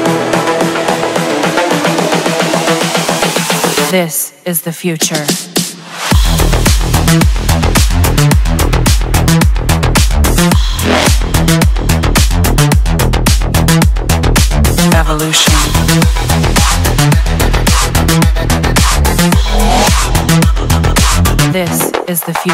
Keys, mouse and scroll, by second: 3.9-5.0 drag, 5.9 middle click, 6.7 middle click, 7.9 click, 9.0 Delete, 10.8 click, 11.6 scroll, 13.3 middle click, 13.9 Return, 15.1-16.0 scroll, 16.0 scroll, 20.1 middle click, 20.3-21.4 scroll, 22.4-22.5 scroll.